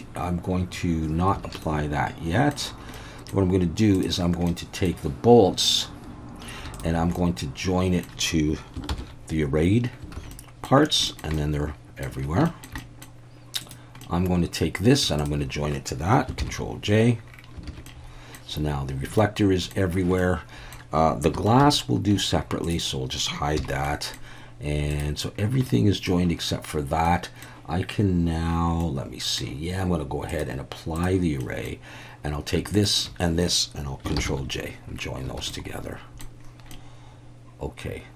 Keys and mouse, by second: 1.4 alt+a, 1.6-2.5 middle drag, 2.9-3.3 middle drag, 4.5 middle click, 6.8 shift+drag, 7.2 middle click, 8.9 ctrl+j, 10.2 alt+a, 10.3-10.7 middle drag, 11.1 shift+middle drag, 11.3-12.0 middle drag, 12.5 shift+middle click, 12.8 middle drag, 14.0-14.6 middle drag, 15.2 shift+drag, 16.4 ctrl+j, 17.7 alt+a, 17.9-18.4 middle drag, 19.2-19.7 middle drag, 20.2-20.8 middle drag, 21.6 alt+h, 22.7 click, 23.6 h, 23.9 middle click, 25.7-26.1 middle drag, 27.1-27.4 middle drag, 28.8 middle click, 30.4-31.1 drag, 31.4 middle click, 32.8 shift+drag, 34.2 ctrl+j, 35.4 alt+a, 35.5-36.2 middle drag, 36.7-38.1 middle drag.